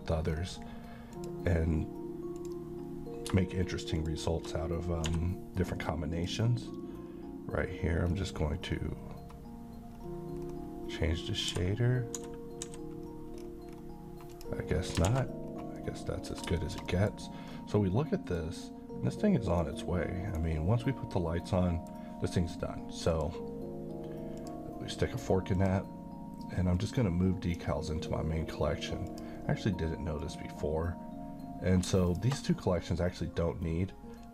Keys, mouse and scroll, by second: 0.3 scroll up 1, 1.2 click, 4.0 shift+click, 5.1 d, 6.1 click, 7.2-7.6 scroll up 1, 8.1-8.7 scroll down 1, 8.7-9.7 scroll up 1, 10.3-11.3 scroll down 1, 11.3 scroll up 1, 11.5 d, 12.2 d, 12.7 d, 13.4-13.7 scroll down 1, 13.7-14.0 scroll up 1, 14.4 click, 14.8 scroll down 1, 15.1 a, 15.5 scroll down 1, 15.8-16.4 middle click, 16.3 scroll down 1, 16.6 middle click, 17.2-17.5 scroll up 1, 17.5-18.4 middle drag, 19.6-20.6 right drag, 21.5-22.1 middle drag, 23.1-27.7 drag, 32.1 click.